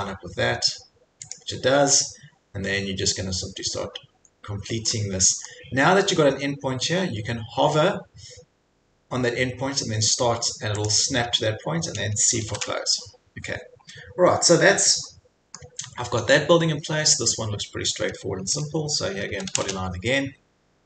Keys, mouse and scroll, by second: 1.4 click, 2.0 scroll, 5.5 middle click, 8.0-8.8 scroll, 10.9 click, 12.4 c, 13.9 scroll, 15.6 scroll, 16.1 middle click, 16.1 middle click, 19.0-20.0 typing, 19.8 scroll.